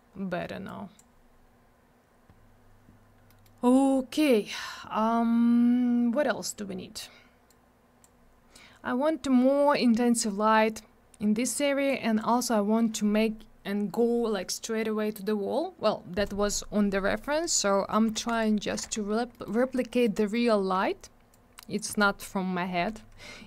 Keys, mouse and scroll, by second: 0.7 click, 3.3 middle click, 3.4 middle click, 3.6-4.4 scroll down 1, 7.5 click, 11.9 click, 17.3 middle click, 17.5 middle click, 17.6-18.0 scroll down 1, 18.2 alt+w, 18.3 right click, 18.8 alt+w, 19.0 scroll down 1, 19.3 middle click, 19.5 middle click, 19.6 scroll down 1, 19.9 middle click, 20.0 middle click, 20.2 scroll up 1, 21.3 shift+click.